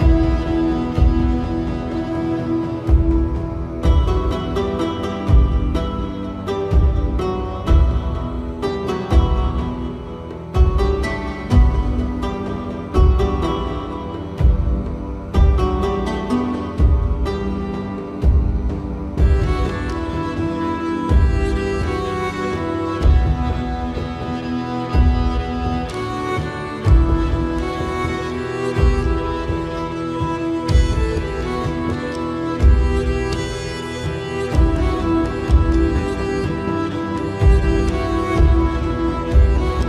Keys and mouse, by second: 0.8 middle click, 1.7 middle click, 4.3 KP_1, 5.2 shift+middle click, 6.0 middle click, 8.3 KP_1, 9.2 shift+middle click, 11.1 k, 18.3 click, 19.2 middle click, 23.3 middle click, 24.2 KP_1.